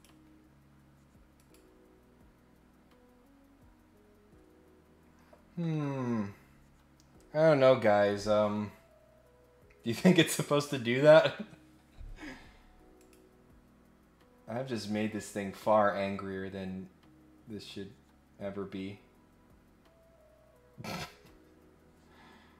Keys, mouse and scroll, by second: 1.3 click, 13.0 click.